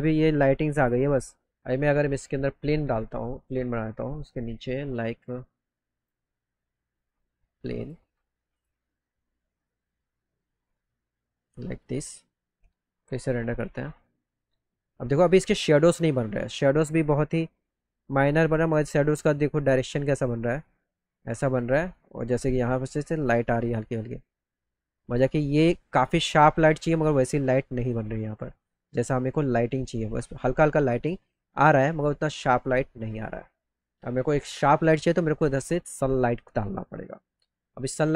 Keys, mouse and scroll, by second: 2.1 click, 3.4 click, 4.4 click, 5.2 click, 5.9 click, 7.8 click, 8.6 click, 9.6-11.8 drag, 9.6-10.6 right drag, 16.3 middle click, 17.9 middle click, 21.4 middle click, 21.8 middle click, 26.1 middle click, 26.6 middle click.